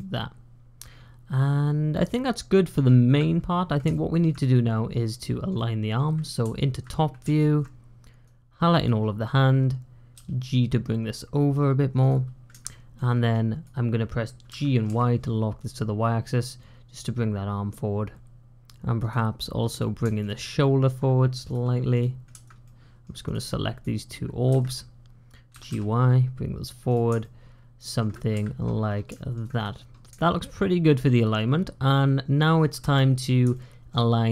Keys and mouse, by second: 2.3 middle click, 2.4 click, 3.9 shift+middle click, 4.3-5.3 middle drag, 5.4 click, 7.2 shift+click, 8.1 click, 10.0 g, 12.6 shift+click, 13.4 click, 14.4 g, 20.4 shift+click, 21.8 click, 22.5 middle click, 23.4 click, 24.4 `, 25.4 g, 27.1 shift+click, 29.1 shift+click, 30.1 shift+click, 31.8 middle click, 33.4 shift+click.